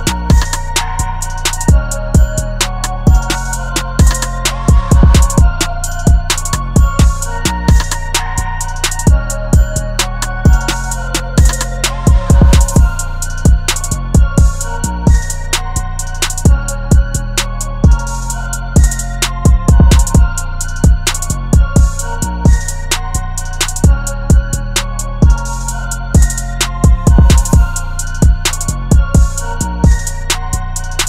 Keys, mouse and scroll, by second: 6.0 Return, 15.9 ctrl+t, 18.5 alt+shift+click, 22.9 Up, 23.6 Up, 23.8 Up, 24.0 Up, 24.2 Up, 25.8 Return.